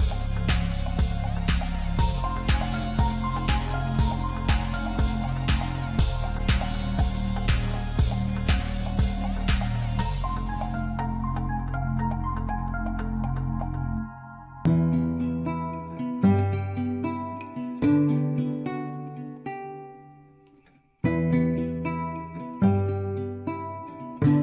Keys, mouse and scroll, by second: 1.6 s, 6.9 e, 10.1 e, 12.7 s, 14.0-14.4 scroll down 2, 14.5-15.7 scroll up 4, 15.7-16.0 scroll up 1, 18.1 s, 22.3 scroll down 2, 22.6 Tab, 23.1 g.